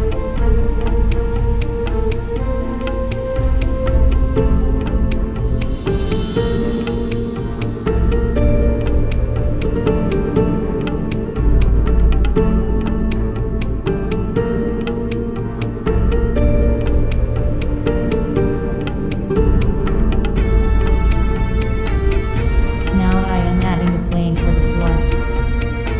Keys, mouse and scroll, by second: 1.1 Tab, 2.9 right click, 4.0 ctrl+x, 4.3 Tab, 6.3-8.6 drag, 8.1 ctrl+s, 8.6-10.1 middle drag, 18.2-19.1 middle drag, 19.6 KP_1, 21.1 ctrl+s, 21.1 shift+a, 25.6 s.